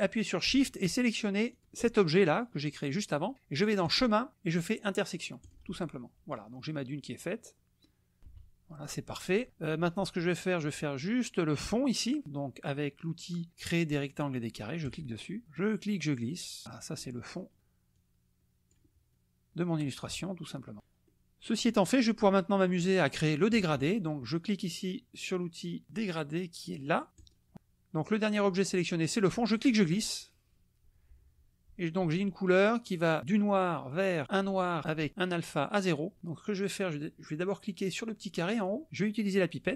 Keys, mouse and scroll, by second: 1.5 shift+click, 3.9 click, 5.5 click, 7.8 click, 8.2 KP_Subtract, 9.1 click, 14.8 click, 15.6-17.2 drag, 17.9 click, 18.9 scroll up 2, 19.1 click, 19.8-21.0 scroll up 2, 21.0-22.2 middle drag, 22.2-24.2 scroll up 2, 27.2 click, 29.5-34.3 drag, 34.3-38.5 scroll up 2, 38.5 click.